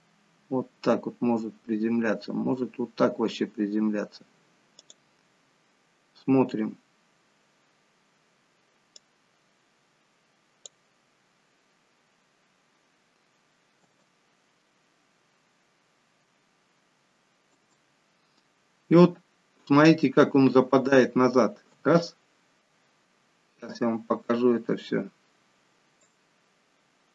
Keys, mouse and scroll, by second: 9.5 click, 11.1 click, 11.1-11.6 scroll up 2, 11.6 scroll down 2, 11.9-12.4 scroll down 2, 12.4-13.8 scroll up 1, 13.8 space, 26.5 click.